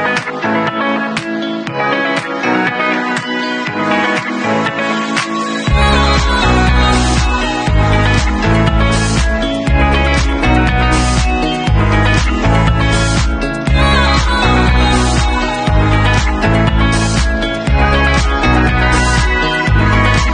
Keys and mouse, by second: 7.5-13.2 middle drag, 13.2-20.3 drag.